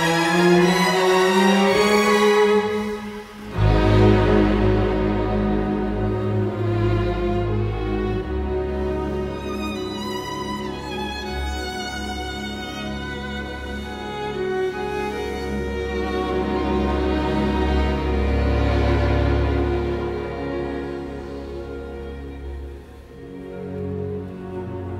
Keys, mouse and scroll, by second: 0.3 space, 1.9 Delete, 3.0 Delete, 4.8 Delete, 5.8 Escape, 12.0 b, 12.1 space, 15.5 Escape, 17.3 Escape, 19.5 KP_Decimal, 20.1 KP_0, 20.6 KP_1, 20.8 Return, 21.6 Escape, 24.1 space.